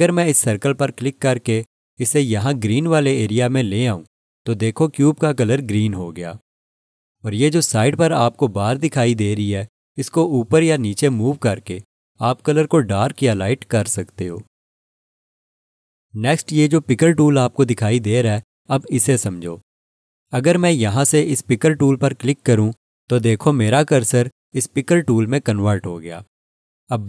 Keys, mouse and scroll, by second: 1.6 click, 10.6 click, 22.6 click.